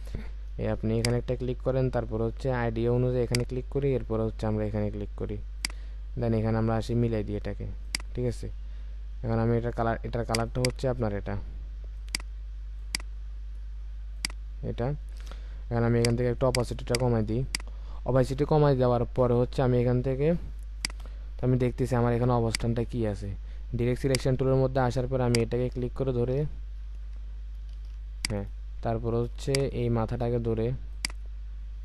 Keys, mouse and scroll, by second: 10.5 double click, 17.4 double click, 21.5-21.9 alt+scroll up 1, 22.4 space, 26.9 ctrl+z, 29.3 space.